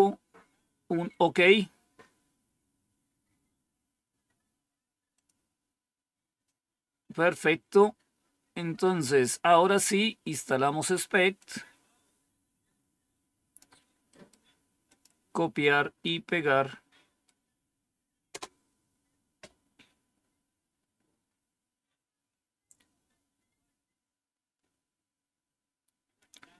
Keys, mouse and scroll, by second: 5.0 click, 8.2-9.1 scroll down 1, 9.1-9.4 scroll down 1, 11.3-13.5 drag, 14.0 right click, 14.8 click, 18.2 Return, 20.6 scroll up 1, 21.1 scroll up 1, 21.7 scroll down 1, 22.3-24.5 scroll down 1, 24.5-26.3 scroll down 1.